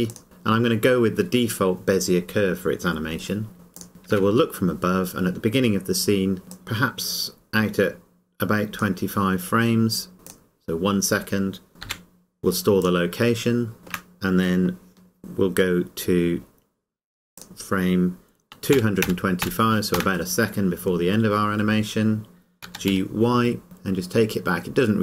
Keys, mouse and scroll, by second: 0.1 click, 3.8 click, 4.4 KP_7, 6.5 click, 12.8 click, 13.8 shift+middle click, 17.4 click, 18.7 KP_2, 22.7 g.